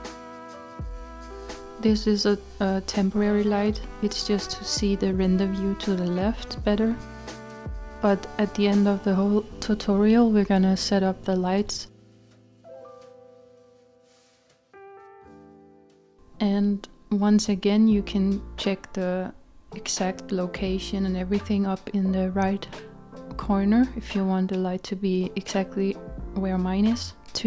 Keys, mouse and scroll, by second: 2.3-2.8 scroll down 3, 3.6-4.3 scroll down 3, 4.3-5.8 scroll down 2, 5.8-7.4 scroll down 1, 7.4-7.9 scroll up 1, 10.0-12.1 scroll up 4, 12.1-12.9 scroll down 2, 12.9 scroll up 1, 19.6 click.